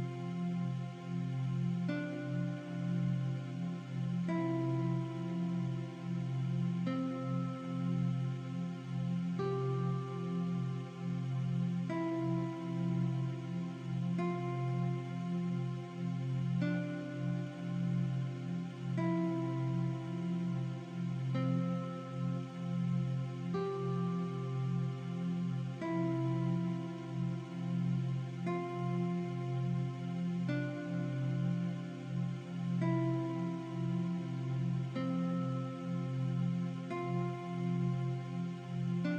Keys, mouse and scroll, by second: 3.3 click, 7.7 ctrl+2, 10.9 click, 12.3 alt+f, 13.8 click, 16.2 click, 17.8 shift+click, 18.1 right click, 19.2 click, 21.1 click, 21.6 click, 22.6 click, 23.2 click, 24.3 click, 28.5 click, 29.8 v, 29.8 click, 31.2 click, 33.8 click, 36.5 ctrl+e, 37.0 click.